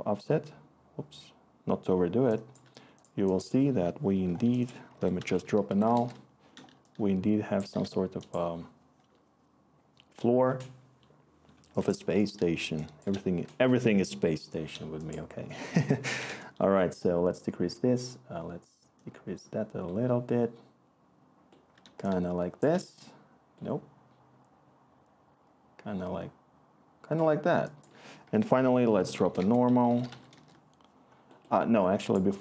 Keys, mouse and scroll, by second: 4.9 Tab, 4.9-5.8 typing, 5.9 Return, 6.5-7.6 click, 7.0 click, 8.3 click, 15.8-16.7 typing, 28.2 Tab, 28.8 n, 29.2 BackSpace, 30.3 Return.